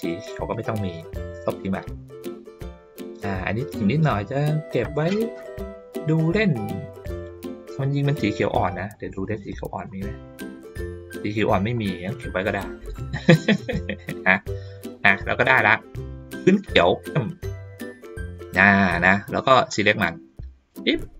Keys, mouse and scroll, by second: 0.5 click, 6.7 ctrl+middle click, 7.5 ctrl+middle click, 8.4 ctrl+middle click, 8.9 middle click, 9.5 middle click, 10.3-10.8 ctrl+scroll down 2, 12.0-12.8 ctrl+scroll down 1, 13.2 middle click, 14.7 middle click, 15.5 ctrl+scroll up 1, 18.3 middle click, 19.7-20.7 drag.